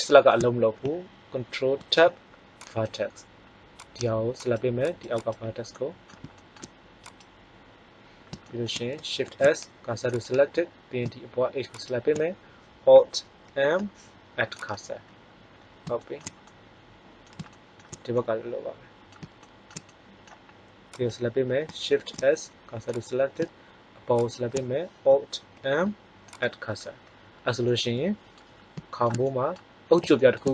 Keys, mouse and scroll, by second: 1.8 ctrl+Tab, 5.7 middle click, 9.2 shift+s, 11.6-13.4 drag, 13.4 alt+m, 21.9 shift+s, 25.5 alt+m, 29.2-30.5 middle drag.